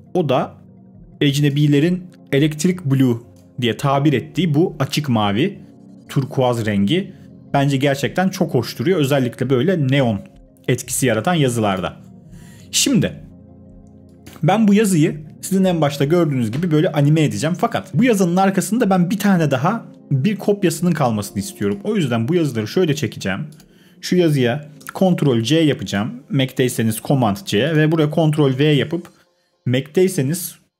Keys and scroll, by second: 25.0 super+c, 27.9 super+v.